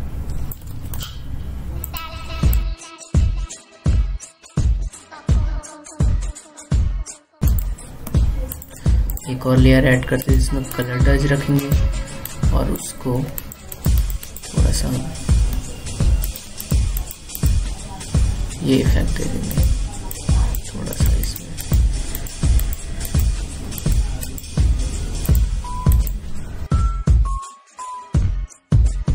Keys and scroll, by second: 1.7 ctrl+z, 3.1 ctrl+z, 3.9 ctrl+t, 4.4 ctrl+t, 6.1 ctrl+z, 6.5 space.